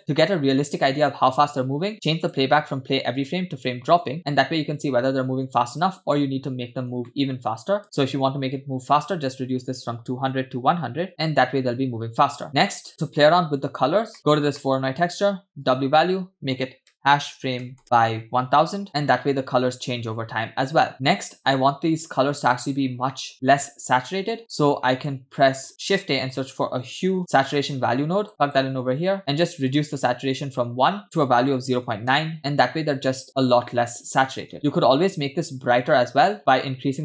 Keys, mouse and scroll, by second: 0.0 space, 1.0-1.6 scroll down 1, 1.6 space, 2.3 click, 4.2 space, 6.6 scroll down 1, 7.1-7.6 shift+middle drag, 7.8 space, 7.9-11.1 drag, 11.1 space, 12.5 space, 12.7-13.3 scroll down 4, 12.9-13.3 scroll up 4, 14.6 middle click, 14.9-15.6 scroll up 1, 15.6-18.9 drag, 18.8 0, 18.9 0, 18.9 space, 21.4 space, 22.8-23.1 scroll down 2, 23.1-24.6 middle drag, 24.9 middle click, 25.5 click, 25.7 middle click, 25.8 shift+a, 29.2-29.7 scroll up 2, 31.0-32.3 drag, 32.9 space, 34.1 space, 36.0-36.4 scroll down 2, 36.2 middle click, 36.4-37.0 scroll up 2.